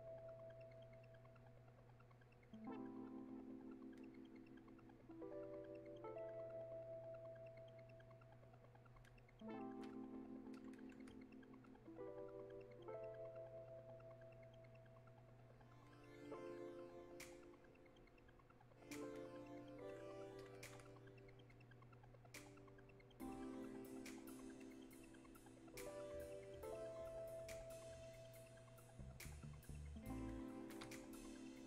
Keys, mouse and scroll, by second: 6.4-31.6 alt+drag.